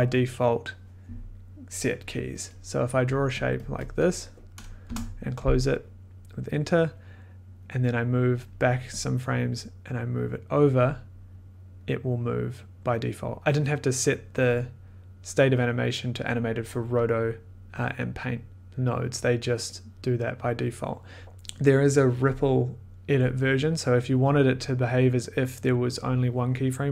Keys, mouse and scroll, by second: 3.1 click, 3.4 click, 3.6 click, 3.8 click, 4.0 click, 4.8 Return, 8.4 click, 9.3 click, 10.7 click, 14.4 click, 15.5 click, 15.6 click, 20.3 click.